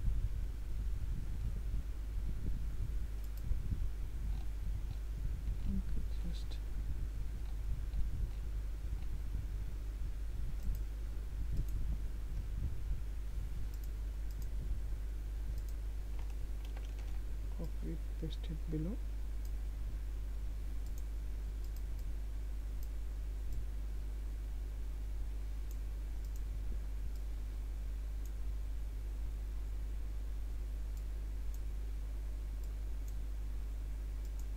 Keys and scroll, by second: 17.3 ctrl+c, 17.5 ctrl+v.